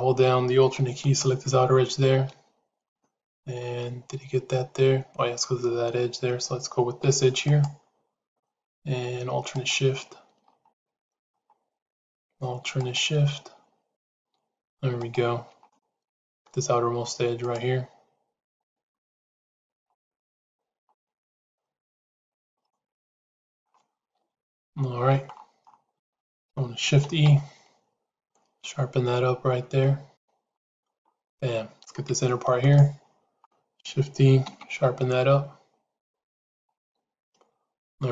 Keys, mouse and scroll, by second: 2.7 middle click, 3.6-5.0 middle drag, 10.6 middle click, 11.8 shift+a, 12.6 click, 13.8 click, 14.5 shift+a, 15.0 click, 15.6 middle click, 16.9 shift+a, 17.3 click, 19.4 click, 19.8 middle click, 20.8 middle click, 21.6 shift+a, 22.6 middle click, 24.0 KP_1, 24.6 KP_3, 25.9 shift+middle click, 26.9 shift+e, 32.5 alt+click, 34.3 shift+e.